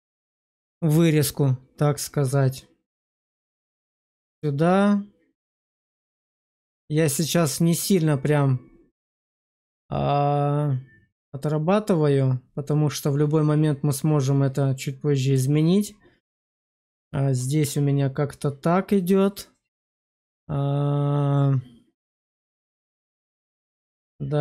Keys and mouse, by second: 7.6 click, 15.2 click.